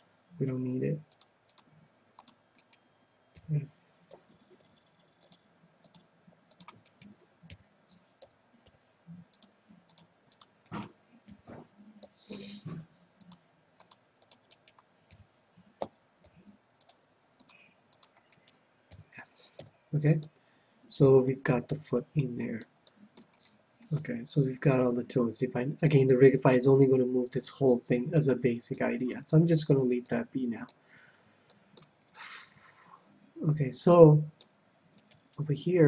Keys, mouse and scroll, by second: 0.5 c, 2.7-4.5 right drag, 3.4 f, 4.1 a, 4.7 c, 6.9-8.8 right drag, 7.5 f, 8.2 a, 8.8 c, 10.8-12.7 right drag, 11.3 f, 12.0 a, 12.9 c, 14.6-16.5 right drag, 15.1 f, 15.8 a, 16.3 c, 18.5-20.3 right drag, 18.9 f, 19.6 a, 20.5-25.7 middle drag, 28.7 KP_1, 28.9-33.3 middle drag, 33.9-35.6 middle drag, 35.0-35.8 right drag.